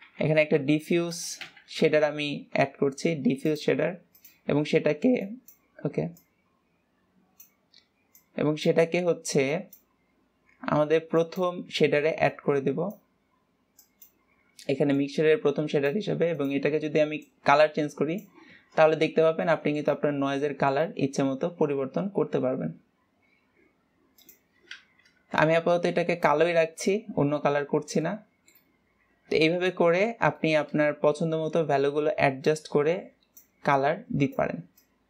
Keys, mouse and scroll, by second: 5.5-6.6 drag, 9.9 click, 11.5 drag, 12.5 click, 14.1 drag, 15.3-16.8 drag, 19.1-19.5 scroll down 2, 19.7 shift+middle click, 20.4 scroll down 2, 20.7 shift+middle click, 21.4-23.3 scroll up 4, 24.5 click, 25.9 Delete, 26.5-26.9 scroll down 2, 27.9 scroll down 9, 28.3-29.9 shift+middle drag, 29.9 ctrl+s, 30.4 scroll down 3, 30.6 shift+middle click, 31.2-31.7 scroll up 3, 31.9-32.9 scroll up 9, 32.9 click, 34.1-35.0 drag.